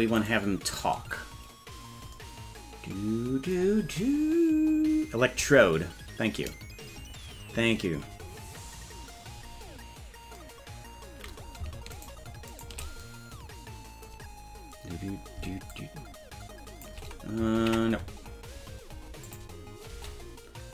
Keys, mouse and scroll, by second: 0.2 right click, 12.0 shift+right click, 12.5 shift+right click, 15.7-16.9 shift+drag, 18.4 ctrl+z, 19.3 click, 19.9 space.